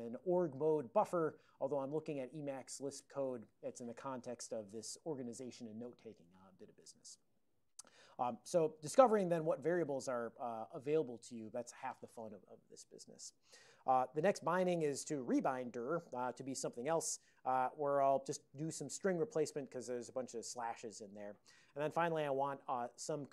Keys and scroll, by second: 4.3 alt+v, 6.6 ctrl+p, 6.9 ctrl+l, 7.2 ctrl+l, 9.0 alt+o, 9.7 ctrl+x, 9.9 k, 10.4 alt+o, 11.1 ctrl+x, 11.4 1.